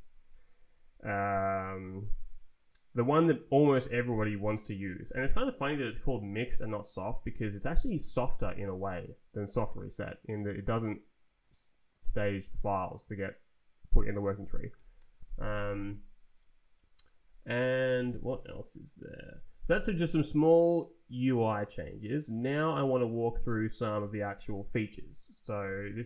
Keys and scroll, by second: 14.7 Escape, 17.6 ctrl+t.